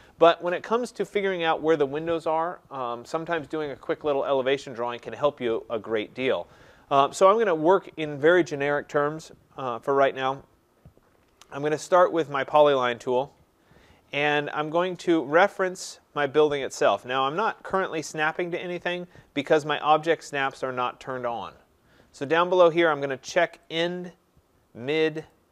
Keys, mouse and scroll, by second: 0.3-4.1 scroll, 12.9 click, 18.1-19.7 scroll, 23.8 click, 25.3 click.